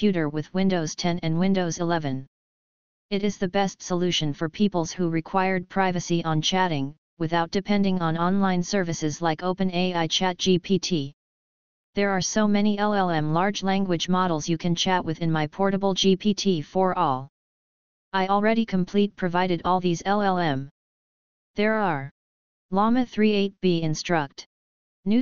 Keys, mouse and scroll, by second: 1.4-2.1 scroll down 2, 3.4 click, 3.9 click, 6.4 click, 7.1 click, 10.2 click, 11.7 click, 13.1 click, 15.8-18.2 drag.